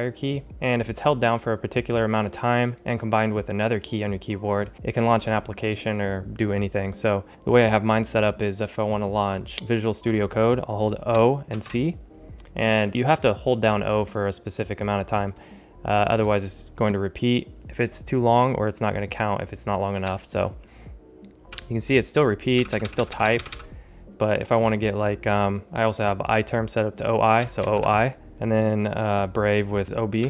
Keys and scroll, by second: 20.5 o.